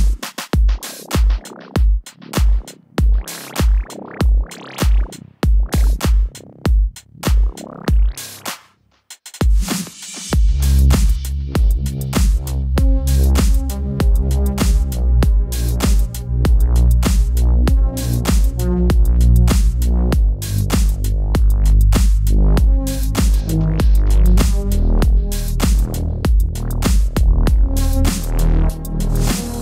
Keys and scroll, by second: 7.5 Return, 8.1 super+Return.